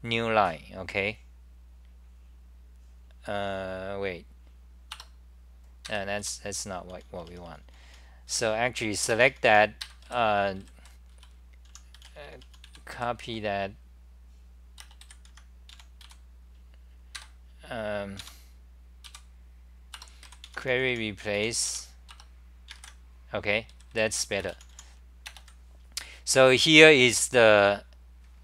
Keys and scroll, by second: 4.9 Return, 5.8 ctrl+g, 6.7-8.8 typing, 10.0 d, 11.2-13.4 typing, 15.2 End, 15.8 a, 18.2 Home, 19.0 k, 20.0 Return, 20.2 Up, 20.4-21.8 typing, 22.1 Return, 23.7 d, 26.7 scroll down 2.